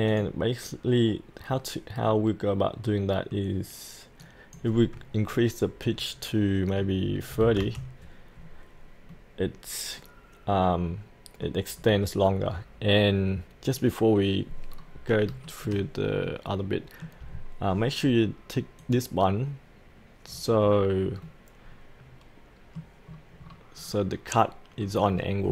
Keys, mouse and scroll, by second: 2.0-3.4 middle drag, 4.2-5.4 drag, 7.3 KP_3, 9.1-11.5 middle drag, 11.7-13.7 scroll down 1, 13.7 click, 14.7-15.3 scroll down 1, 15.5-17.2 shift+middle drag, 17.2-18.8 scroll down 1, 18.8 click, 20.3-20.7 scroll up 1, 21.3-23.1 middle drag, 23.1-23.4 scroll down 1, 24.8-25.5 scroll up 1.